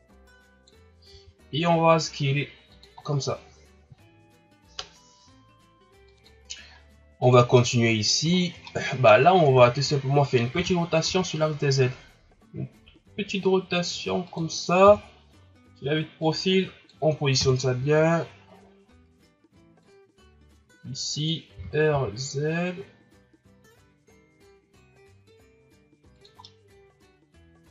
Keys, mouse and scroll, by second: 1.1 s, 3.1 scroll down 3, 6.1 KP_1, 6.7 scroll up 3, 7.2 right click, 7.5 middle click, 8.3-8.6 shift+scroll up 7, 8.6 middle click, 9.3 ctrl+scroll up 2, 9.6 shift+scroll down 1, 10.5 r, 14.8 KP_3, 16.2-17.4 drag, 17.4 KP_1, 18.4-18.8 scroll down 5, 18.8-19.8 scroll up 1, 19.8-21.5 drag, 21.5 r, 26.4-27.7 middle drag.